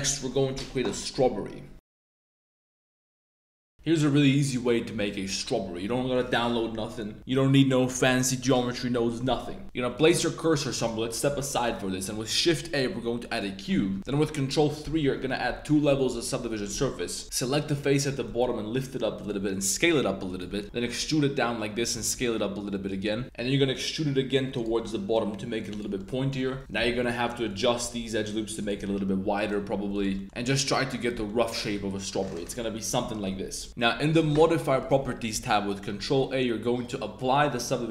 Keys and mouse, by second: 3.7-4.4 middle drag, 4.4-5.5 drag, 5.5-6.1 middle drag, 10.2-10.6 shift+drag, 10.7 click, 11.1 click, 11.3 shift+click, 11.7 shift+a, 14.0 super+0, 14.8 super+3, 16.2 Tab, 16.4 click, 17.0 middle drag, 17.7 click, 18.0 g, 18.3 z, 19.2 click, 19.5 s, 20.3 click, 20.6 middle click, 20.8 e, 21.8 click, 22.0 s, 22.8 click, 23.2 super+z, 23.4 e, 24.6 s, 25.7 click, 26.0 middle click, 26.7-29.7 typing, 27.5 click, 29.3 alt+click, 29.9 click, 30.0 Tab, 30.1 middle click, 30.4-31.0 middle drag, 31.2 middle drag, 32.1 click, 32.4 Tab, 32.6 click, 32.9 2, 33.1 g, 33.3 z, 33.6 Tab, 33.7 Tab, 34.1 click, 34.7 click, 37.2 super+a.